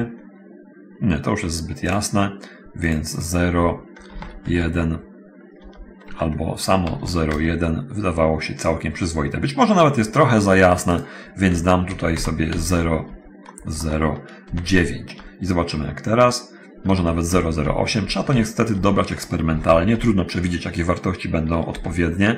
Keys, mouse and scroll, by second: 0.0 click, 4.4 BackSpace, 4.4 1, 4.7 Return, 5.8 Return, 6.3 BackSpace, 7.6 Return, 7.6 ., 7.6 1, 10.9 click, 12.1 End, 12.4-14.7 typing, 15.3 Return, 17.0 Return, 18.2 End, 18.4 BackSpace, 18.9 3, 19.9 Return, 19.9 BackSpace, 19.9 8, 21.9 Return.